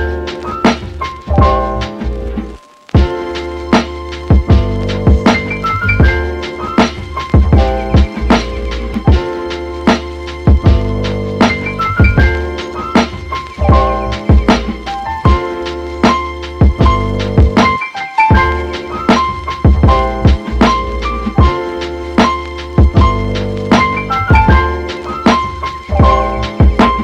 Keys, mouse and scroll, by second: 0.9-1.2 scroll up 3, 1.2-1.8 middle drag, 1.8 Tab, 2.5 middle click, 2.9-3.3 scroll up 2, 3.3 middle click, 3.7 2, 4.1-5.8 shift+middle drag, 5.8 alt+click, 6.5-8.3 middle drag, 8.3-10.6 right drag, 11.0 middle click, 11.9 alt+click, 12.3-13.7 right drag, 13.7 middle click, 14.4 alt+click, 15.3 alt+click, 15.8-17.5 right drag, 17.5-19.5 middle drag, 19.5 alt+click, 19.9-22.3 right drag, 22.7 middle click, 23.2 alt+click, 24.1-24.8 right drag, 24.8-26.0 middle drag, 26.0 alt+click, 26.5-27.0 right drag.